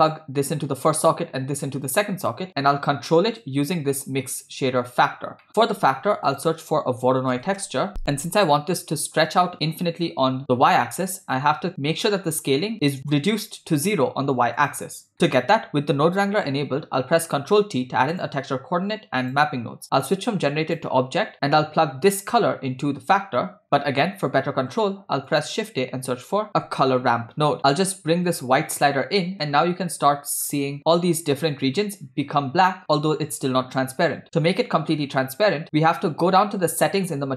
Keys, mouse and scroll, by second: 0.2 click, 1.9 click, 3.4-4.7 drag, 5.4 middle click, 5.8 shift+a, 11.1 middle click, 14.6 click, 15.3 middle click, 16.9 ctrl+t, 18.1 click, 19.3 click, 20.1-20.9 drag, 21.3 middle click, 22.2-24.5 drag, 24.5 shift+a, 27.6 click, 28.3-30.5 drag, 30.8 scroll up 4, 31.5 scroll down 1, 35.9-37.3 scroll down 4.